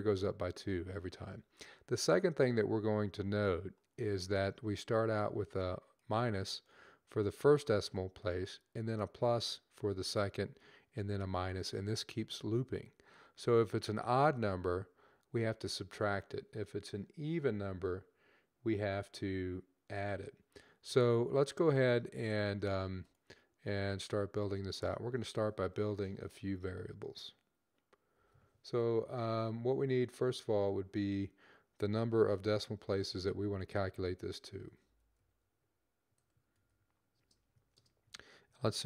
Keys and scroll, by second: 32.7-37.4 typing.